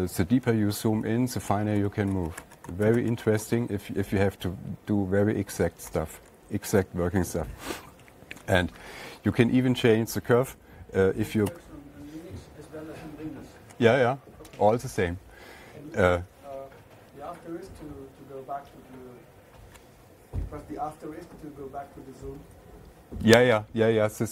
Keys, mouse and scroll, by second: 0.0 alt+Down, 1.3 alt+Left, 1.8 alt+Left, 2.1 alt+Up, 2.3 alt+Up, 2.6 alt+Left, 2.7 alt+Up, 3.1 alt+Left, 3.3 alt+Up, 3.5 alt+Up, 3.6 alt+Left, 6.7 *, 12.0 ctrl+Tab.